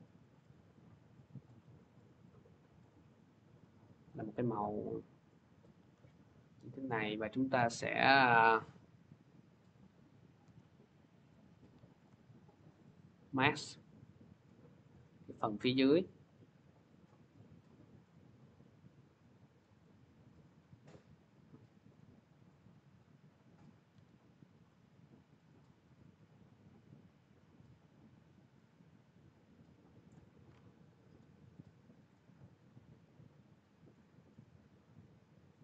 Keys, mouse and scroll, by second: 0.2 click, 1.3 click, 2.1 click, 3.0 click, 3.9 click, 4.7 click, 7.8 click, 9.6 click, 10.3 m, 11.3 click, 11.8 Delete, 12.5 click, 14.7 click, 19.2 click, 21.7 click, 22.7 click, 23.8 t, 29.9 click, 31.0 click, 31.9 click, 32.7-33.3 scroll, 33.6 scroll.